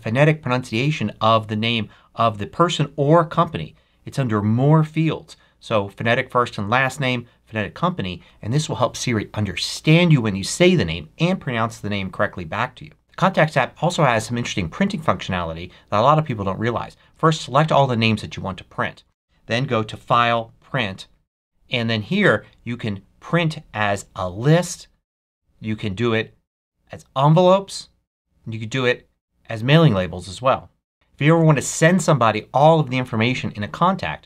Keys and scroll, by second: 17.9 super+a.